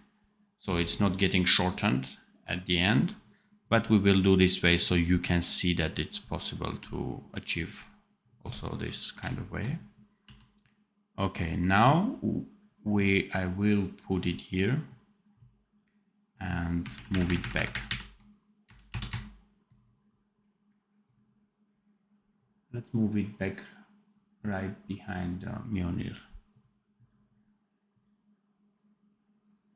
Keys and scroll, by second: 10.1 v, 16.8 shift+KP_Subtract, 17.4 shift+KP_Subtract, 18.7 KP_Add.